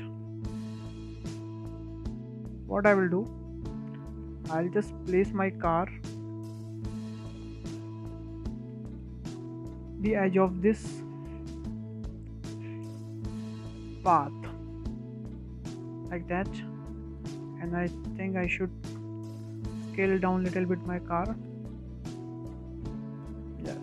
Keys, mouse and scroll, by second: 0.3 click, 0.3 shift+middle click, 0.4 click, 0.7 drag, 0.8 drag, 1.1 shift+middle drag, 1.3 drag, 1.6 drag, 1.7 click, 1.9 click, 2.1 click, 2.2 Tab, 2.2 scroll down 3, 2.3 middle click, 2.3 scroll up 2, 2.4 shift+middle click, 2.5 scroll down 2, 2.7-3.1 middle drag, 3.4-4.1 shift+middle drag, 4.1 `, 4.9 scroll down 1, 5.2-6.6 shift+middle drag, 6.6 click, 7.1 scroll up 2, 7.3-7.9 shift+middle drag, 7.9 click, 8.4-9.0 shift+middle drag, 9.0 scroll up 2, 9.2 w, 9.6 shift+middle click, 10.2 drag, 11.1-11.8 shift+middle drag, 11.8 click, 12.3-12.7 scroll up 1, 12.7 shift+middle click, 13.3 click, 14.4 click, 15.4-16.1 scroll up 4, 16.1 click, 16.9 click, 18.1-19.2 scroll down 7, 19.2 s, 21.7-22.1 scroll up 4, 22.1 shift+middle click, 22.4-22.7 scroll up 3, 22.7-23.3 shift+middle drag, 23.3 s.